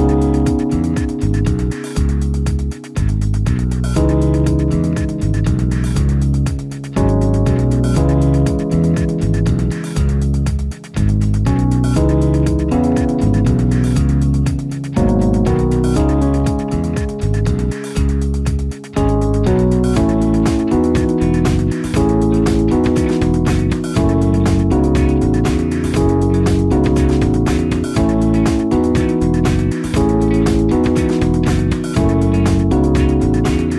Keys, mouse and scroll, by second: 17.4 u, 18.5-19.6 typing, 21.3 space, 25.3-26.4 typing, 27.6 0, 33.1 0.